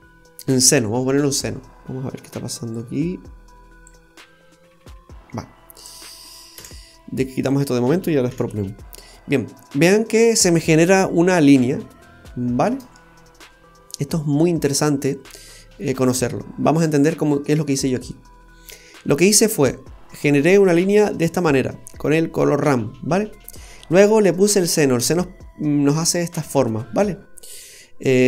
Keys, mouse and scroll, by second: 1.8 middle click, 1.8-2.7 scroll down 3, 2.7 click, 5.8 click, 6.5 Delete, 7.5 click, 8.3 Delete, 9.8-10.3 scroll down 1, 11.4 middle click, 15.0-15.3 scroll up 3, 15.4 middle click, 15.9 scroll up 1, 16.0-16.6 scroll down 7, 17.3-17.6 scroll down 3, 17.6 middle click, 18.7-19.2 scroll up 4, 23.7-24.1 scroll up 4, 28.0 click.